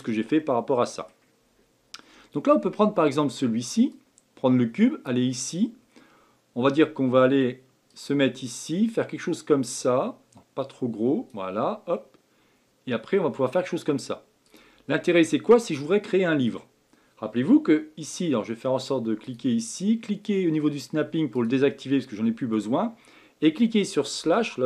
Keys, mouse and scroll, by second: 3.9-7.1 drag, 7.8 click, 14.9-17.9 middle drag, 19.2-21.4 drag, 22.0-24.2 middle drag, 24.2 KP_Divide.